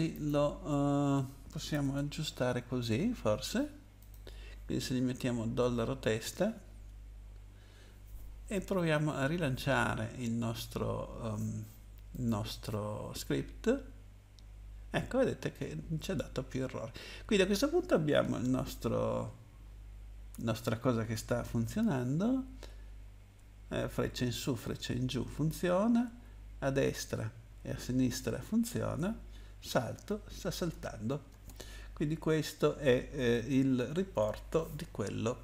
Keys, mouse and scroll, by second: 0.1 click, 1.7 BackSpace, 2.2 t, 4.0 click, 12.1 click, 22.0 Up, 22.5 Up, 22.8 Up, 26.2 Down, 26.2 Right, 26.7 Right, 26.7 Right, 29.5 Left, 29.5 space, 31.3 space, 32.3 Up, 32.6 Up, 33.3 Right, 33.8 Right, 33.9 Right.